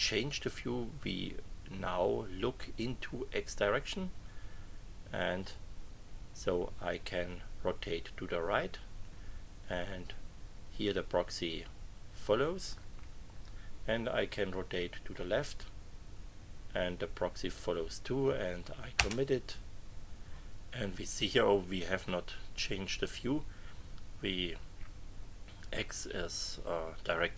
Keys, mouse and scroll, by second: 5.5-9.2 drag, 14.3-17.7 drag, 18.9 Return.